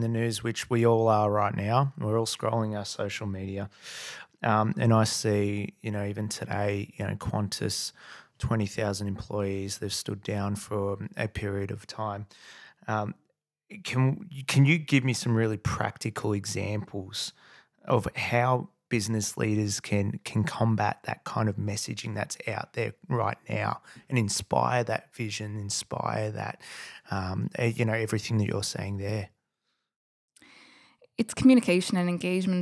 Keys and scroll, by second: 8.8 super+Tab, 9.6 super+Tab, 11.2 super+Tab, 11.8 super+Tab, 12.0 super+Tab, 12.2 super+Tab, 26.5 super+].